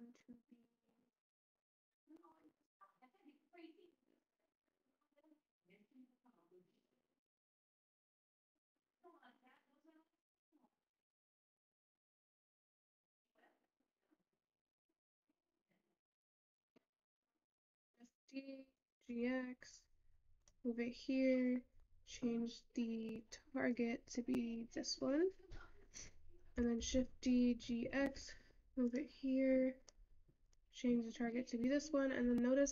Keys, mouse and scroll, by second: 1.9-3.7 drag, 6.8-8.4 scroll down 2, 8.8 click, 12.3-14.1 drag, 16.5 click, 19.2 shift+d, 24.9 click, 29.2 shift+d.